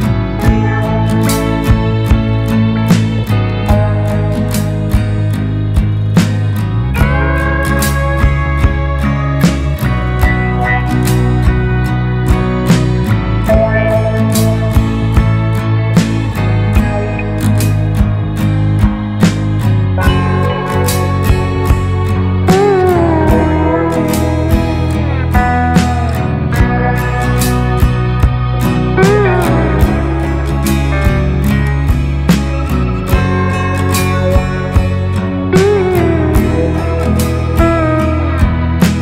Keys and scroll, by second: 4.8 BackSpace, 4.9 Return, 11.7 BackSpace, 12.1 BackSpace, 12.2 KP_1, 12.3 KP_Decimal, 13.4 Return, 18.9 BackSpace, 19.0 KP_1, 19.2 KP_Decimal, 23.5 Delete, 33.4 Caps_Lock, 35.0-36.5 typing, 37.2 Return.